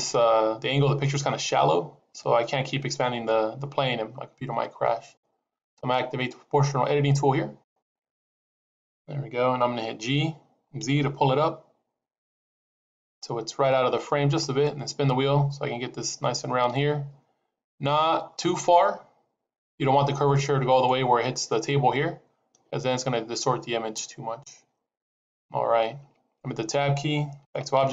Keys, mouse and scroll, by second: 7.5 click, 9.9 g, 27.4 Tab.